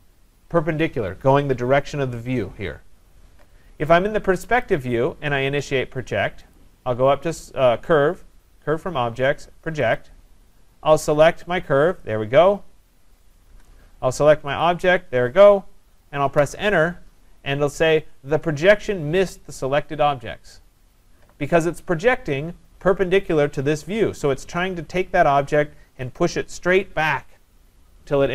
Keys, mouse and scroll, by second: 2.5 scroll, 4.7 click, 6.6 click, 10.0 click, 12.0 click, 13.5 Return, 14.6 click, 16.4 Return.